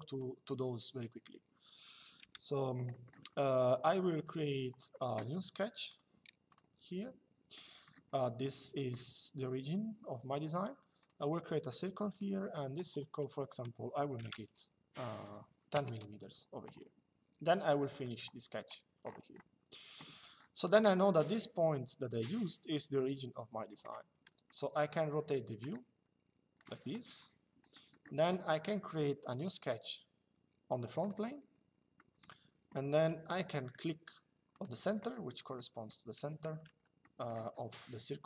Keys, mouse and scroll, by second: 1.9 Delete, 2.6 middle click, 3.8 click, 5.6 click, 10.7 click, 11.8 click, 13.9 KP_1, 15.4 Return, 17.6 click, 24.2 shift+middle click, 26.3 click, 27.4 middle click, 29.1 click, 30.7 click, 31.7 middle click, 32.6 click, 34.3 click, 36.4 Escape, 36.7 middle click.